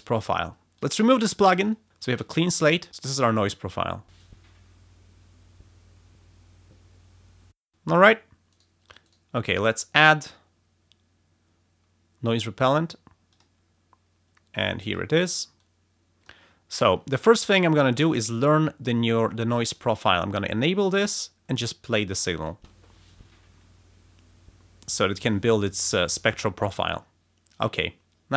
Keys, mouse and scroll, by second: 2.0 space, 3.2 click, 3.5 space, 7.5 space, 8.4 right click, 8.8 click, 9.0 right click, 13.2 click, 14.5 click, 22.4 space, 26.6 space.